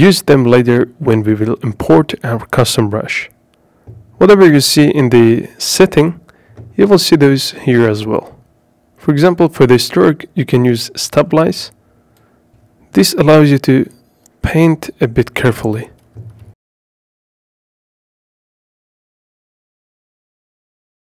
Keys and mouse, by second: 0.5 click, 1.1 click, 9.4-12.5 drag, 13.5 click, 17.5 ctrl+z.